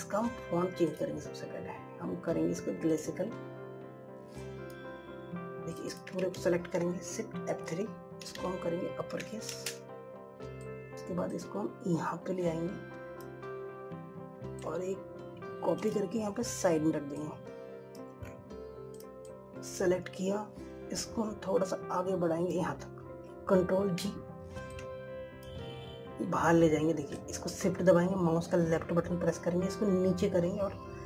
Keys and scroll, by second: 7.5 ctrl+a, 8.1 shift+F3, 25.4 ctrl+g.